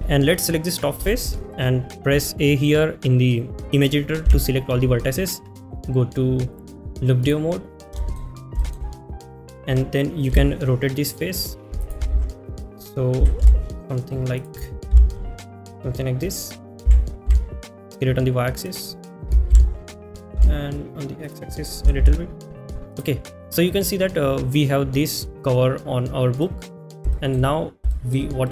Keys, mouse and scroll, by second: 11.4 r, 12.3 ctrl+z, 13.3 s, 13.4 x, 16.6 g, 21.7 y, 21.7 x, 22.2 x, 22.2 s.